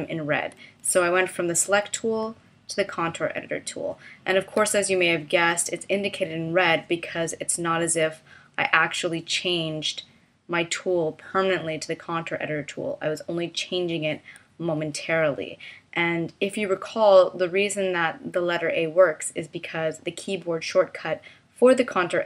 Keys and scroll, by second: 2.2 a.